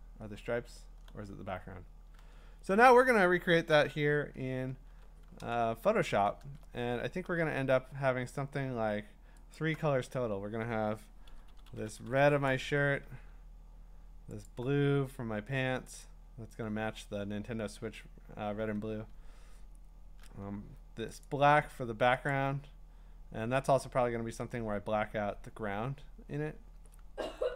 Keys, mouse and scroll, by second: 0.8-1.9 scroll up 12, 1.9 scroll, 2.2 alt+Tab, 3.2 alt+Tab, 3.7 alt+Tab, 4.9-6.0 b, 6.0 click, 7.2 b, 9.5 alt+click, 11.3-12.0 typing, 12.5 click, 14.4 alt+click, 16.0 click, 19.2-21.2 scroll, 21.2 alt+click, 22.3 click.